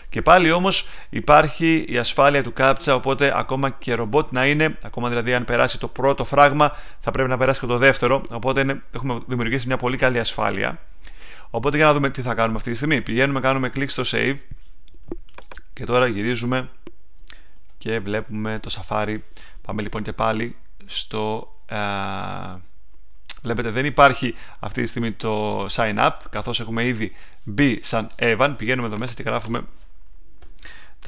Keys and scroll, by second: 17.5 super+Tab, 30.7-31.0 typing.